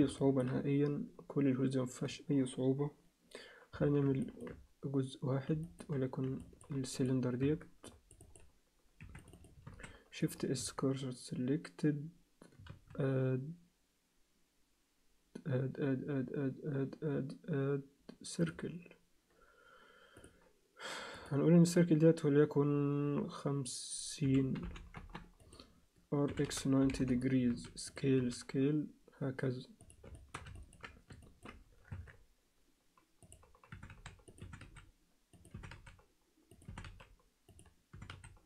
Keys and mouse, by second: 0.2 alt+shift+middle click, 4.2 shift+middle click, 5.6 alt+shift+middle click, 6.4 alt+shift+middle click, 7.0 click, 7.4 Tab, 7.9 click, 8.2 click, 9.0 2, 9.2 click, 9.4 click, 9.7 shift+s, 10.6 Tab, 12.7 shift+a, 20.1 click, 21.1-25.3 drag, 26.3 r, 27.5 5, 28.1 5, 30.1 alt+shift+middle click, 30.5 ctrl+alt+middle click, 31.2 alt+shift+middle click, 31.9 Tab, 33.2 click, 33.7 e, 34.4 e, 35.5 e, 36.6 e, 37.9 e.